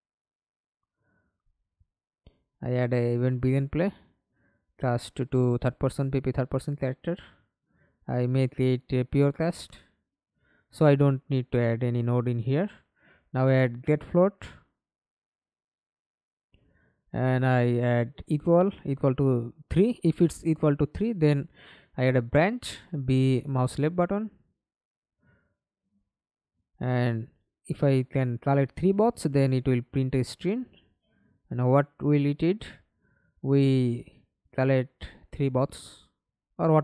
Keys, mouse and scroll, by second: 0.0-0.6 typing, 2.2-4.8 typing, 4.8 Return, 5.8 right click, 10.6-12.4 typing, 12.7 Down, 12.9 Down, 13.1 Down, 13.5 Return, 14.2 right click, 16.2 =, 16.4 =, 17.1 Return, 19.1 3, 19.6 Return, 21.1 b, 25.6 right click, 27.4-28.5 typing, 28.5 Return, 31.0-36.3 typing.